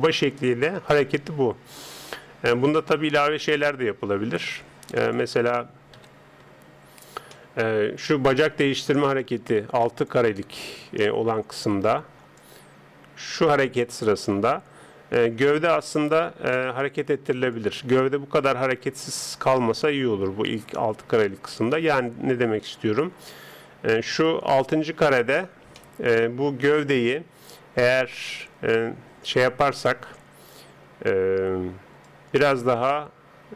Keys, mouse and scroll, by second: 6.0 KP_3, 6.9 middle click, 7.8-9.0 middle drag, 9.0 click, 10.8-12.4 middle drag, 12.4 click, 16.5-17.6 middle drag, 17.6 click, 25.4-28.4 middle drag, 26.7 right click, 32.0 click.